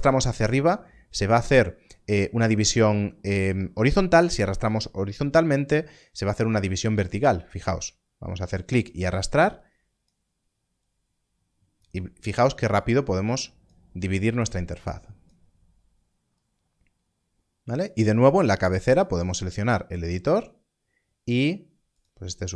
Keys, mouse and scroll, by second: 7.8 click, 21.8 click.